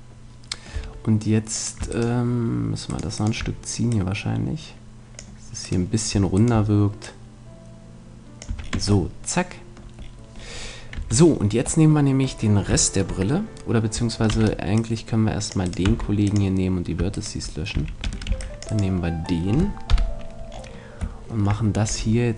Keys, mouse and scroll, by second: 0.7 Tab, 1.5-4.9 right drag, 3.9 click, 5.0 click, 5.9-7.0 right drag, 8.2 click, 8.2 right click, 8.5 a, 8.6 middle click, 8.7 Tab, 9.1 middle click, 10.9 Tab, 14.3 c, 15.7-17.9 right drag, 15.9 x, 17.7 a, 18.3 c, 19.5-20.5 middle drag, 19.9 KP_7, 21.9 e.